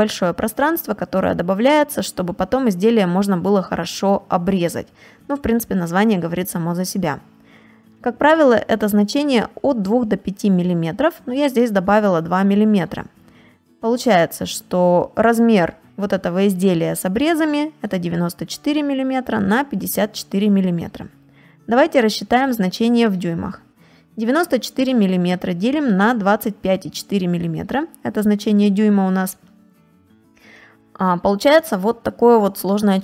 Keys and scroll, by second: 4.2 space, 6.7 space, 12.4 space, 14.1 space, 20.1 space, 29.4 space, 32.7 space.